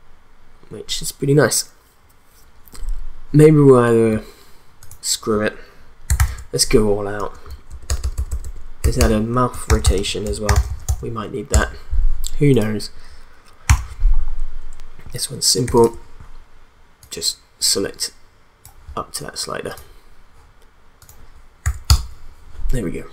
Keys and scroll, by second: 6.2 ctrl+d, 7.2 Return, 7.5 Right, 7.7 BackSpace, 9.4-11.4 typing, 11.5 Return, 13.7 r, 21.6 0, 21.9 Return.